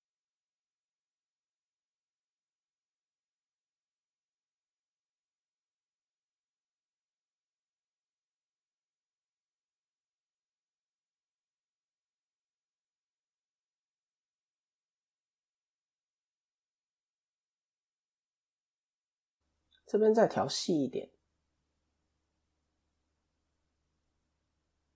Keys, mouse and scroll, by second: 0.7 ctrl+r, 2.4 KP_1, 3.0 KP_3, 4.2 scroll up 2, 4.3 shift+middle click, 5.4-6.0 scroll down 1, 6.1-6.4 scroll down 2, 6.4 o, 7.4 s, 13.8 scroll up 2, 14.9 scroll up 3, 14.9 s, 21.5 click, 23.1 s.